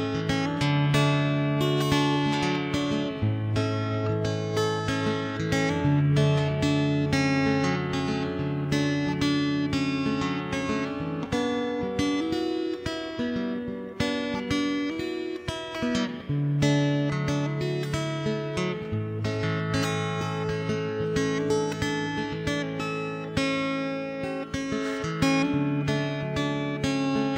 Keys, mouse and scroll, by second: 0.3 KP_0, 0.5 click, 0.9 shift+space, 1.1 ctrl+KP_3, 1.3 click, 3.3 Tab, 3.3 middle click, 3.9 a, 4.1 a, 4.2 middle click, 4.7 c, 5.3 middle click, 5.7 ctrl+l, 5.9 middle click, 6.3 ctrl+KP_3, 6.5 middle click, 6.9 r, 8.5 middle click, 9.9 middle click, 10.7 Tab, 10.7 middle click, 10.9 z, 12.9 middle click, 13.9 middle click, 14.6 ctrl+s, 14.8 middle click, 14.9 click, 15.0-19.9 typing, 15.7 middle click, 16.3 right click, 16.9 right click, 18.4 alt+h, 18.7 right click, 19.2 right click, 20.5 alt+c, 21.3 right click, 21.9 ctrl+j, 22.3 middle click, 23.1 middle click, 23.7 right click, 23.9 middle click, 24.9 Tab, 24.9 middle click, 25.6 click, 27.2 a, 27.3 l.